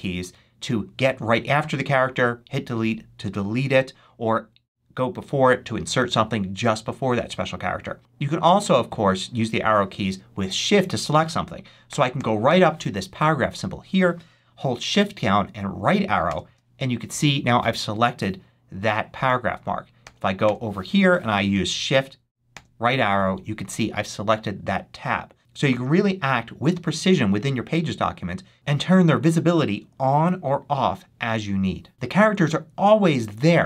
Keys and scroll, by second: 11.7 Right, 16.1 shift+Right, 19.9 Right, 22.3 shift+Right.